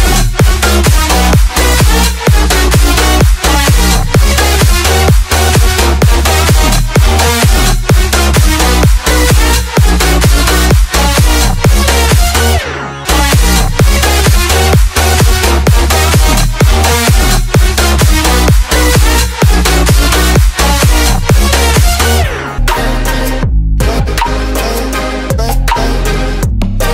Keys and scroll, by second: 2.6 Return, 7.5 ctrl+i, 12.5 space, 16.4 space, 19.5 space, 21.1 space, 22.7 space.